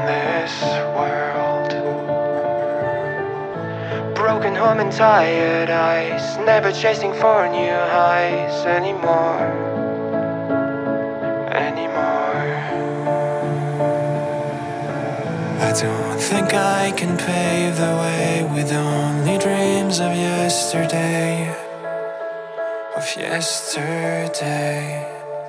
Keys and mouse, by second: 0.3-1.0 drag, 1.6-2.7 drag, 3.3 ctrl+z, 4.0-5.5 drag, 6.9-8.3 drag, 9.1 click, 12.4 click, 14.5 Tab, 16.0 click, 16.8-18.3 drag, 19.4 Tab, 22.9 click, 23.2-25.1 drag.